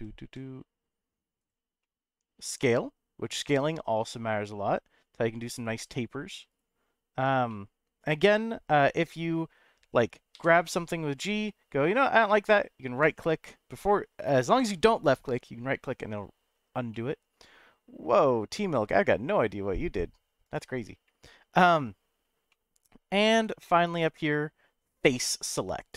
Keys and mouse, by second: 0.2 z, 1.4 right click, 1.8 middle click, 2.4 s, 6.5 right click, 7.5-8.7 middle drag, 10.3 g, 13.0 right click, 16.9 middle click, 22.5 middle click, 25.1 click.